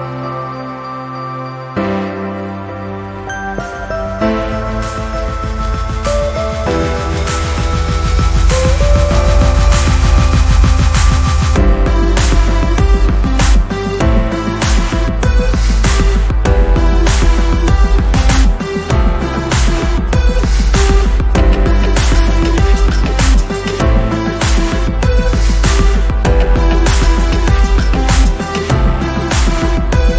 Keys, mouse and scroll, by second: 3.1 Down, 4.5-5.1 ctrl+scroll down 1, 5.1 space, 5.3 click, 5.6 space, 6.2-7.4 ctrl+scroll up 1, 7.7-8.9 drag, 11.4-12.3 drag, 18.9-19.3 ctrl+scroll up 1, 20.7-22.0 drag, 29.9-30.1 ctrl+scroll down 1.